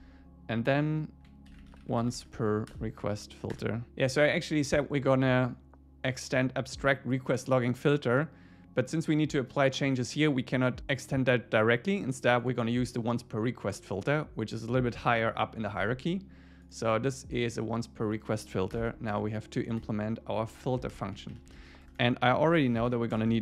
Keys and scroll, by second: 2.7 Return, 18.7 alt+Return, 20.4 Up, 20.7 super+Left, 20.9 Return, 21.2 Up, 21.5 super+Right, 21.9 Return.